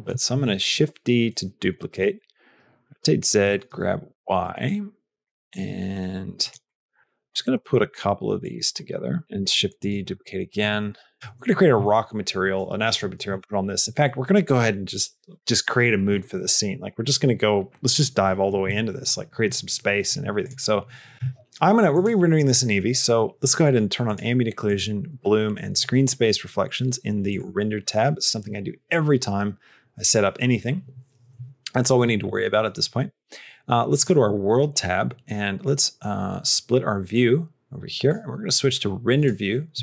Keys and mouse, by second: 0.2 shift+d, 1.1 middle click, 1.9 r, 3.2 r, 3.3 g, 4.7 middle click, 5.1 g, 6.5 middle click, 7.4 g, 8.7 shift+middle click, 9.1 middle click, 9.2 shift+d, 10.1 r, 10.8 g, 18.5 n, 24.5 click, 27.2 click, 37.1 click.